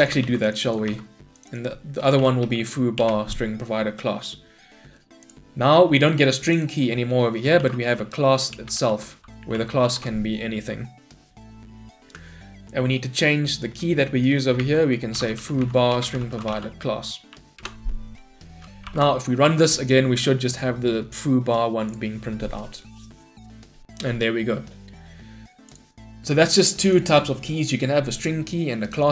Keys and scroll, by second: 0.6 ctrl+c, 0.9 ctrl+v, 3.0 Return, 8.6 Return, 14.6 Delete, 15.9 Delete, 16.0 Return, 18.8 shift+F10.